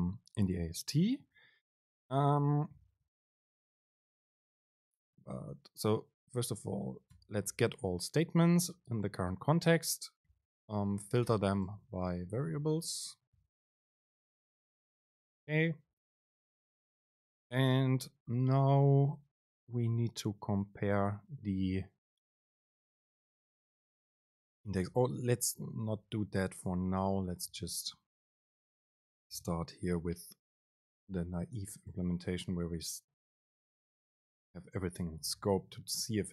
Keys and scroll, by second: 4.6 BackSpace, 5.4 BackSpace, 5.4 super+space, 15.8 Right, 25.3 BackSpace, 25.7 Right, 26.6 End, 26.8 Left, 28.9 super+x, 29.0 Right, 29.3 BackSpace, 32.6 BackSpace, 32.6 super+space.